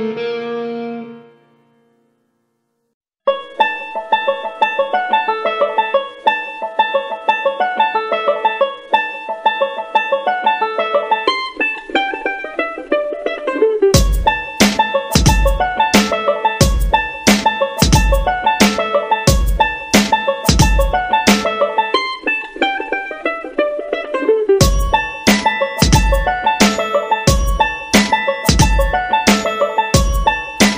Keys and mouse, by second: 0.0-0.1 typing, 1.3 shift+d, 3.2 r, 3.9 s, 4.7 shift+middle click, 5.3 shift+d, 8.2 g, 9.4 shift+middle click, 10.0 shift+d, 12.2 r, 13.1 shift+middle click, 13.9 g, 15.6 shift+d, 16.9 r, 17.5 s, 18.4 r, 19.1 g, 19.8 shift+middle click, 20.5 shift+d, 21.3 r, 22.4 g, 23.4 s, 24.8 g, 26.5 shift+d, 27.6 r, 28.7 g, 29.7 r.